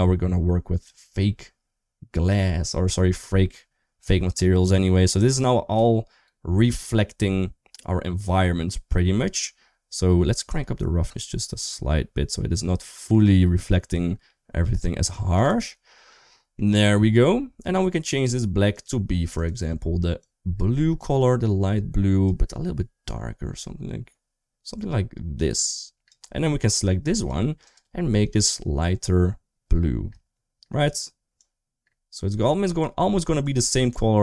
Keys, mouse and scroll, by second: 3.3-5.1 middle drag, 5.5-9.0 middle drag, 10.2-15.3 drag, 16.2 middle click, 18.1 click, 18.5 click, 19.2 click, 27.1 click, 27.5 click.